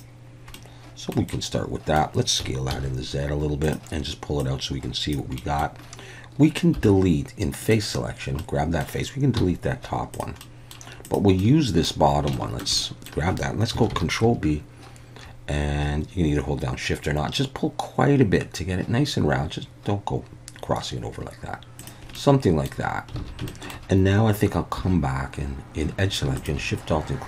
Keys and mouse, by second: 0.6 middle click, 1.4 middle click, 2.4 s, 2.7 z, 3.7 click, 4.4 click, 5.4 middle click, 6.8 3, 7.6 middle click, 8.4 middle click, 9.4 x, 10.4 middle click, 11.1 click, 11.4 middle click, 12.4 shift+middle click, 12.8 middle click, 13.9 ctrl+b, 21.8 click, 22.2 middle click, 23.2 alt+a, 23.5 shift+middle click, 24.8 2, 26.4 alt+shift+click.